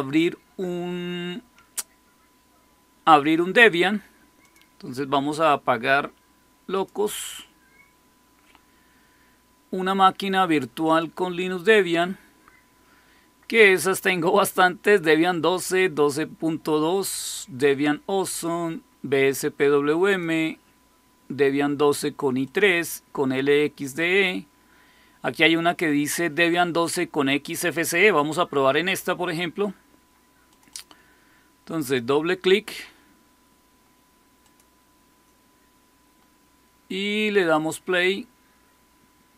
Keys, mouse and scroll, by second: 4.4 click, 6.7 click, 10.8 click, 11.8 click, 18.2 click, 20.0 click, 22.4 click, 23.7 click, 30.4 click, 30.6 click, 34.3 click, 37.3 click.